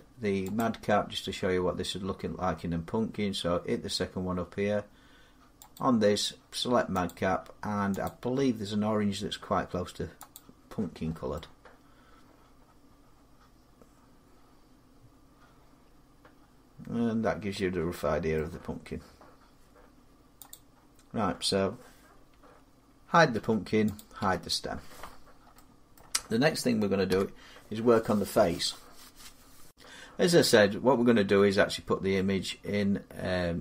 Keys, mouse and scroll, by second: 0.3 click, 0.8 middle click, 5.5 click, 6.8 click, 7.8 click, 10.1 click, 10.7 middle click, 10.9 middle click, 18.1 middle click, 20.3 click, 22.2-23.1 scroll, 23.1 h, 23.7 click, 24.0 h, 25.0 scroll, 25.7 middle click, 26.9 7, 29.5 click, 29.5 x.